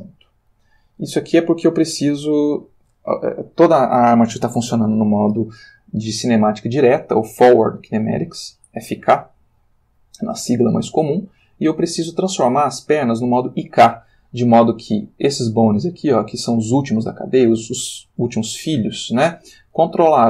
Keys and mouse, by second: 0.1 Escape, 1.0 click, 2.2 alt+r, 8.4-9.8 drag, 9.8 middle click, 11.2-12.3 shift+middle drag, 15.2 click, 15.9 shift+click.